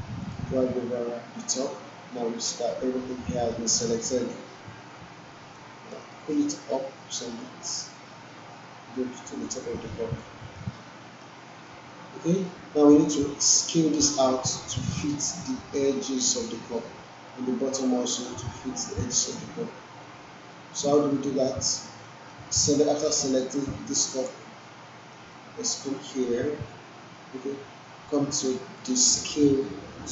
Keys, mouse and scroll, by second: 0.2-1.8 drag, 5.6-6.4 alt+right click, 6.1 alt+middle click, 7.4-10.3 drag, 10.8-11.4 alt+middle click, 13.5 typing, 16.9 alt+middle click, 20.2 alt+middle click, 22.0 alt+middle click, 23.0-24.2 drag, 24.8 alt+middle click, 25.4-25.9 alt+drag.